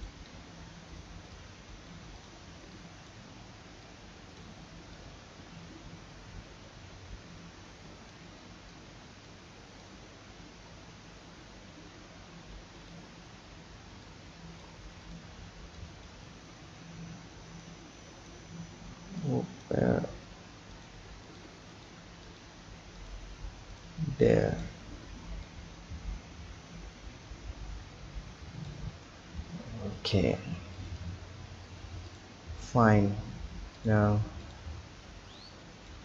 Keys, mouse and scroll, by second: 0.3-1.4 scroll up 3, 1.4 click, 2.5 b, 3.8 click, 4.9 click, 8.7 click, 9.9 click, 14.0-15.1 drag, 15.4 b, 16.6 scroll down 1, 17.3 b, 18.7 b, 20.1 b, 21.2 click, 21.7 click, 22.3 click, 22.9 click, 23.7 click, 24.0 b, 25.4 click, 29.0-29.4 scroll down 1, 29.4 Tab, 30.7 click, 32.1-34.5 drag, 35.3-36.0 drag.